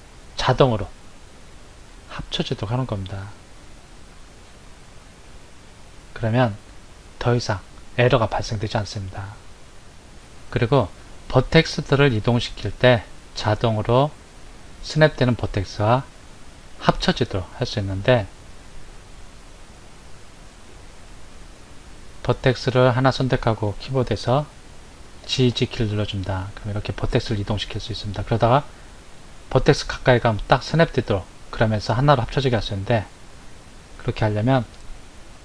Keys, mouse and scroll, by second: 20.0 click, 25.2 g.